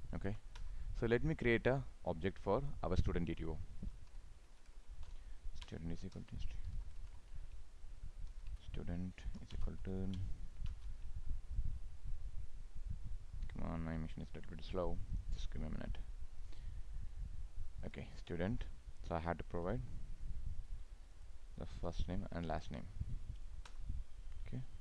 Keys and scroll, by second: 10.6 ctrl+space.